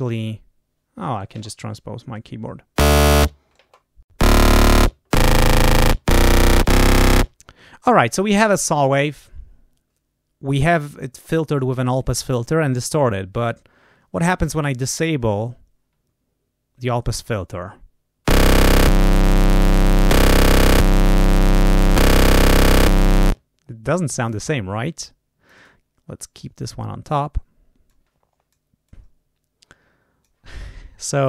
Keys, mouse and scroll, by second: 18.7 click, 19.9 click, 20.6 click, 21.7 click, 22.7 click, 24.1 click, 24.9 click, 25.5 right click, 26.9 click, 27.8 click, 28.7-30.3 drag.